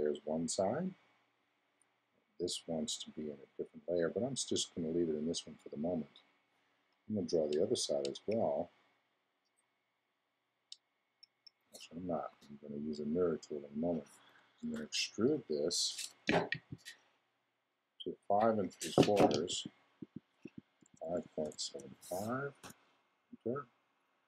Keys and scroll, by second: 12.3 x, 14.6 super+e, 20.8 5.